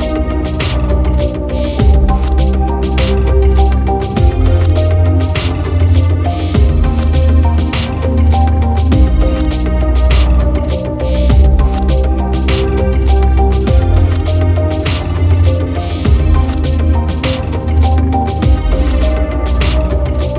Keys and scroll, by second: 6.1 ctrl+t, 12.0 ctrl+t.